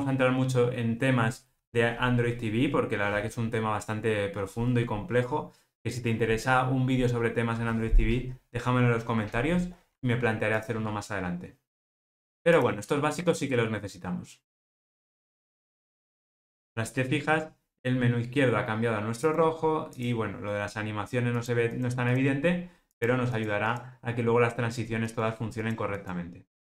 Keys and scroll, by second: 12.0 ctrl+r.